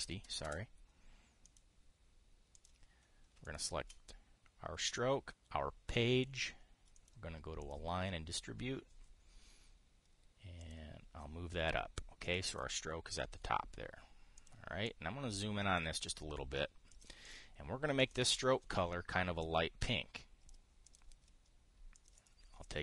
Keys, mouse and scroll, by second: 0.6 KP_5, 0.7 KP_6, 2.1 click, 3.3 click, 4.1 shift+click, 7.6 click, 8.3 click, 11.3 click, 12.9 click, 13.2 click, 15.1 click, 15.5-16.5 drag, 16.6-17.9 drag, 18.0 click, 18.7 click, 20.1-21.3 drag, 21.6 click, 22.7 click.